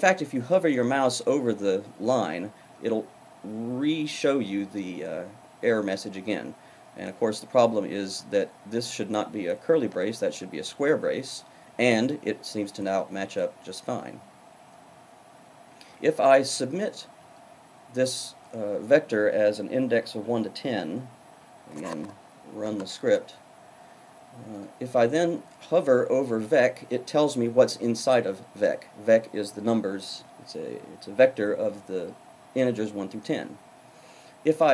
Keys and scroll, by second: 21.7 Up.